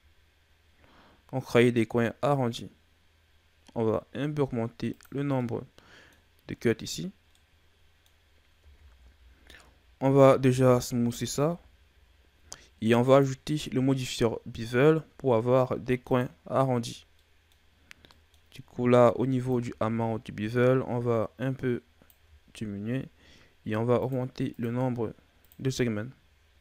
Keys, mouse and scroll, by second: 5.3-8.5 middle drag, 8.5 Tab, 10.4 w, 12.9 click, 17.0 middle click, 17.5-18.0 scroll up 2, 18.0-19.4 middle drag, 19.4 click, 23.9-26.6 drag.